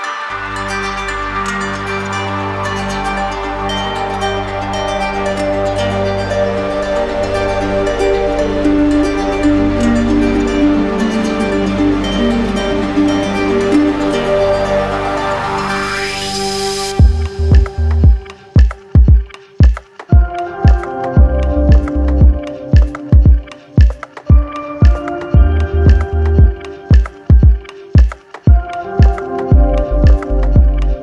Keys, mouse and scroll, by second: 0.5 shift+click, 1.0 shift+click, 1.6 shift+click, 2.1 shift+click, 3.1 click, 4.3 click, 5.0 click, 5.4 shift+click, 6.4 alt+click, 7.0 shift+click, 7.5 shift+click, 8.6 shift+click, 9.9 alt+click, 13.9 click, 14.8 click, 16.5 click, 18.1 click, 19.2 click, 20.7 click, 21.5 alt+click, 26.4 click, 26.8 shift+click, 27.6 alt+click, 29.7 click.